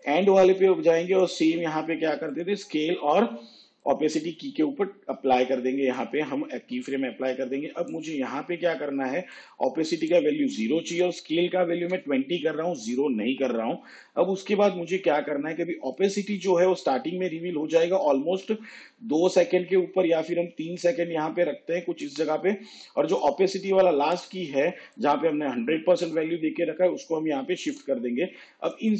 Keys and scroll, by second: 11.6 2.